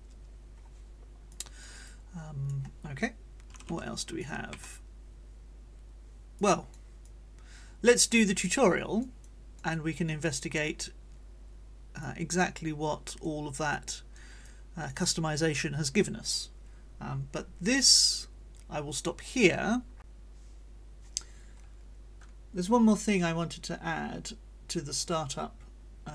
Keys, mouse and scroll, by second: 1.3 click, 1.8 right click, 3.5 [, 4.0 ], 6.4 click, 7.1-8.1 drag, 8.2-8.9 scroll up 1, 8.9 click, 10.0 click, 12.1-14.5 drag.